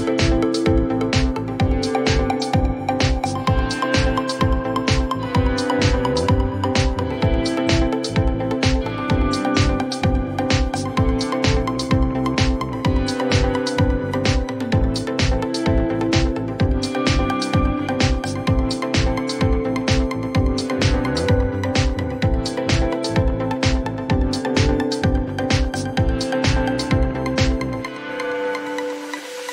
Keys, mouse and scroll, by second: 0.0-1.1 typing, 1.7 Return, 4.2 Return, 6.5 click, 9.4 click, 12.1 click, 15.1 click, 16.9 click, 17.1-18.6 typing, 23.0 click, 25.9 click, 28.6 click.